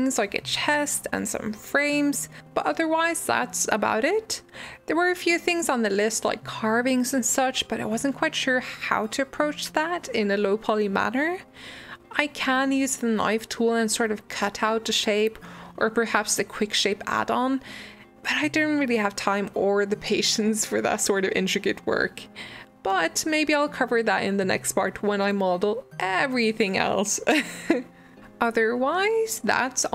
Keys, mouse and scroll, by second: 1.0 middle click, 1.8 g, 2.8 middle click, 3.2 shift+d, 3.9-4.3 scroll down 2, 4.3 g, 5.1 middle click, 5.6 scroll up 2, 5.9 shift+middle click, 6.6 g, 7.1 scroll down 3, 7.4 shift+d, 8.7 middle click, 9.6 g, 10.5 middle click, 10.7 scroll down 2, 10.9 Tab, 11.0 middle click, 11.2 click, 11.8 scroll down 1, 12.1-12.6 scroll up 2, 12.6 click, 12.8 click, 13.3 drag, 14.0 m, 15.6 click, 15.8 shift+middle drag, 16.0-16.5 scroll up 2, 16.5 click, 16.8 shift+click, 17.2 r, 20.1 g, 20.9-22.0 middle drag, 22.0 g, 22.8 g, 23.9-25.3 middle drag, 25.5 scroll up 2, 25.7 scroll down 1, 25.8-27.7 shift+middle drag, 28.1-29.9 middle drag.